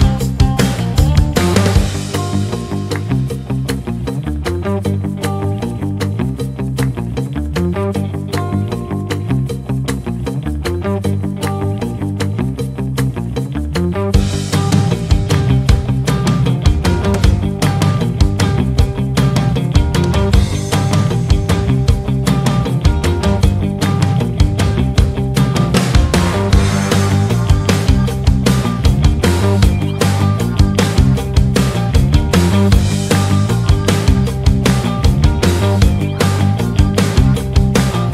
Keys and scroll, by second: 0.6 shift+Page_Down, 4.7 ctrl+z, 7.8 ctrl+z, 14.3 shift+F2, 14.9 Escape, 16.4 shift+F2, 23.5 ctrl+z.